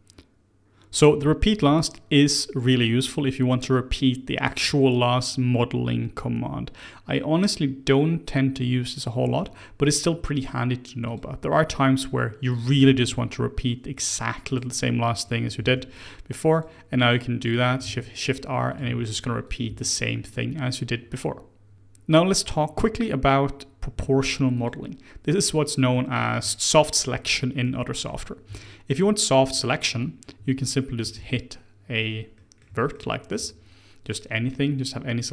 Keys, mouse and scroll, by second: 10.3-11.0 right drag, 11.0 click, 12.5 click, 12.9 ctrl+b, 15.2 click, 15.5 ctrl+b, 17.4 click, 17.8 shift+r, 18.7 click, 18.8 shift+r, 19.4 click, 19.6 shift+r, 20.2 click, 21.7 shift+a, 25.4-26.1 middle drag, 26.1-26.5 scroll up 3, 26.5-28.4 shift+middle drag, 28.4 Tab, 29.5 click, 31.0 1, 31.1 click, 32.3-35.3 middle drag.